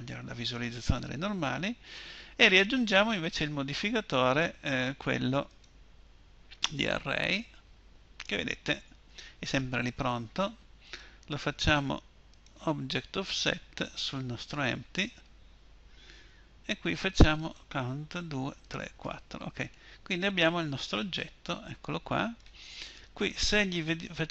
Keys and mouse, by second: 19.8-21.7 middle drag.